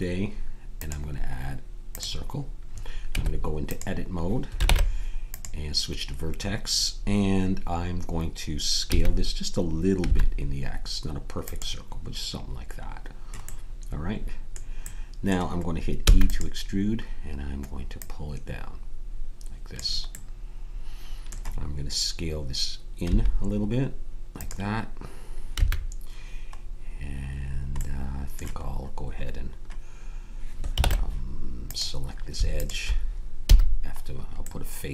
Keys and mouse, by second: 3.1 Tab, 4.6 ctrl+Tab, 8.9 s, 13.4-16.2 middle drag, 16.0 e, 17.9-20.1 drag, 23.1 s, 26.3 a, 30.8 ctrl+Tab, 32.5 click, 33.4 f.